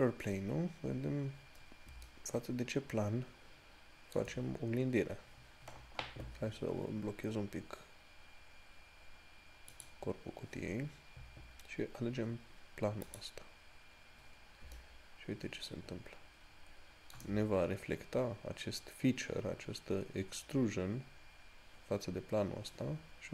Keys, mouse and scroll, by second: 2.3 shift+middle click, 10.0 click, 13.4 click, 15.0 shift+middle click.